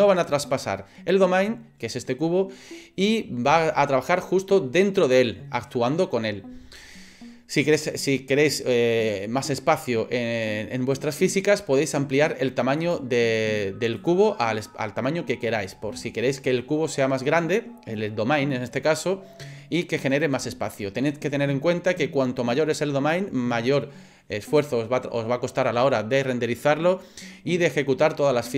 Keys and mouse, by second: 12.8 click, 14.0 click.